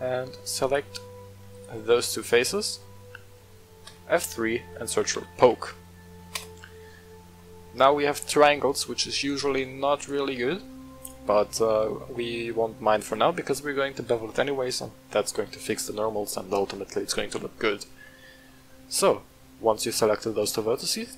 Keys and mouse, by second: 0.6 click, 1.0 middle click, 1.5 shift+click, 1.8 middle click, 2.7 middle click, 3.8 F3, 7.3 middle click, 9.2 click, 9.9 right click, 10.3-10.6 middle drag, 11.0 shift+click, 11.5-12.7 middle drag, 16.9-20.9 middle drag.